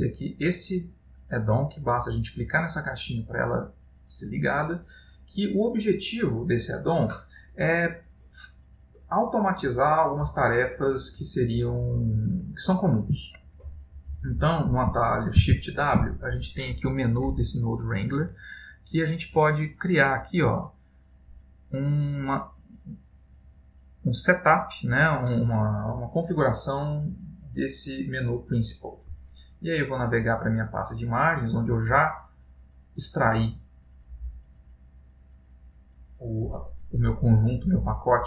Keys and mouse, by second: 14.0 middle click, 15.7 shift+w.